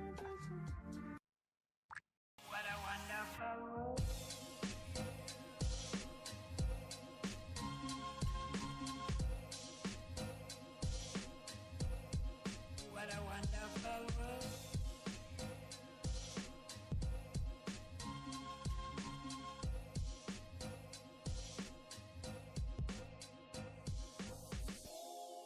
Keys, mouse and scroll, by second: 1.3 click, 1.5 click, 1.8 click, 1.9 Escape, 2.9 click, 2.9 Escape, 3.8 click, 4.0 click, 5.0 click, 5.1 Escape, 9.2 click, 9.7 r, 9.8 r, 11.0 click, 11.0 Escape, 11.8 click, 12.5 click, 13.0 click, 13.3 click, 13.7 click, 13.8 Escape, 14.8 click, 14.8 Escape, 15.0 click, 15.5 click, 16.0 click, 16.6 click, 17.4 click, 17.5 Escape, 18.2 typing, 18.8 click, 18.8 Escape, 19.3-20.4 typing, 19.7 click, 19.8 Escape, 21.0 Escape, 21.0 click, 21.6 click, 22.1 click, 22.5 click, 23.0 r, 23.1 r, 24.4 click, 24.5 Escape, 25.0 click.